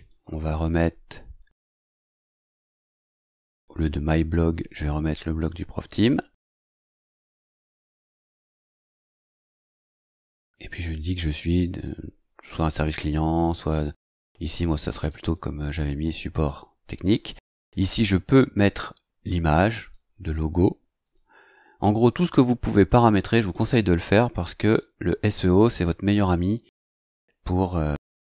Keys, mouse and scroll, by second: 0.4 click, 3.2-4.2 scroll up 4, 5.4-6.6 drag, 7.0 ctrl+c, 7.4-8.2 scroll down 4, 9.6-10.3 drag, 10.2 ctrl+v, 11.3 click, 14.9 click, 19.8 click, 21.0 click, 23.3 click, 24.7 click, 26.8-27.1 scroll down 1, 27.4 scroll down 2.